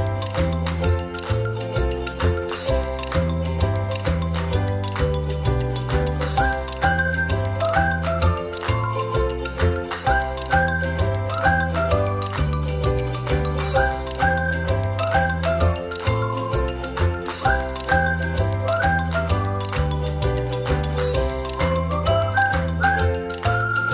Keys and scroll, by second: 3.3 ctrl+z, 4.8 space, 7.1 ctrl+c, 7.3 ctrl+f, 10.3 space, 23.1 ctrl+c, 23.3 ctrl+f.